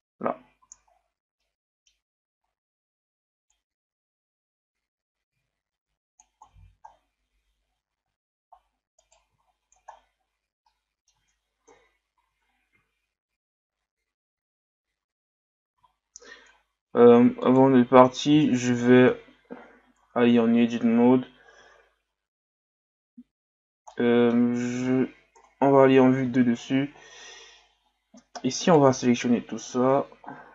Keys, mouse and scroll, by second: 0.6 a, 0.9-1.4 scroll down 3, 1.4-4.4 middle drag, 6.8-7.6 scroll down 1, 7.6-8.0 scroll up 2, 8.0-8.6 scroll down 1, 8.6-9.0 scroll up 1, 9.0 right click, 9.4-10.2 scroll down 2, 10.2-10.7 scroll up 1, 10.7-11.7 middle drag, 11.7 KP_1, 12.8 scroll up 2, 13.7 scroll up 1, 14.4 scroll up 2, 15.4 scroll up 1, 16.5-16.9 scroll up 2, 17.4 right click, 18.4 shift+right click, 19.5-20.1 scroll up 2, 20.1 Tab, 23.9 scroll up 1, 23.9 middle click, 24.4 z, 25.3 KP_7, 26.4-27.6 scroll up 2, 28.6 right click, 28.9 c.